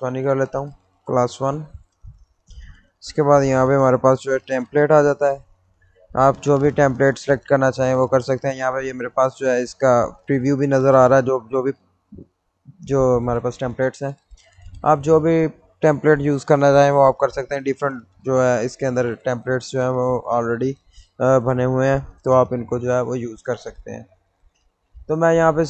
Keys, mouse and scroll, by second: 0.0-1.4 typing, 2.9 click, 7.5 click, 11.8 click.